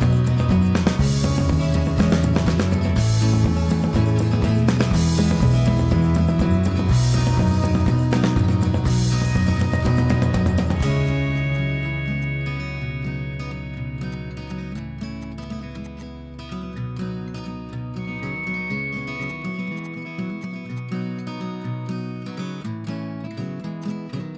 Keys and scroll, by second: 0.0 ctrl+h, 4.2 Escape, 6.3 Delete, 8.4 m, 11.3 e, 12.0 p, 14.4 e, 18.5 Escape, 20.0 p, 20.8 Escape, 23.2 Escape, 23.3 Escape, 23.5 Escape, 24.2 h.